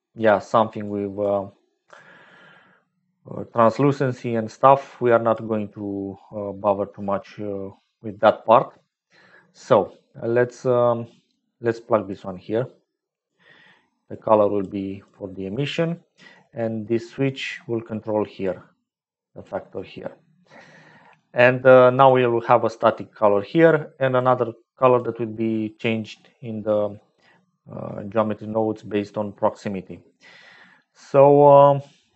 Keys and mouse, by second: 0.8 click, 1.7 middle click, 1.8 click, 5.0 click, 10.0-11.6 drag, 12.0-13.4 drag, 14.4-17.4 drag, 17.6-19.9 drag, 21.1 click, 24.2 click, 29.9 middle click, 30.0 click.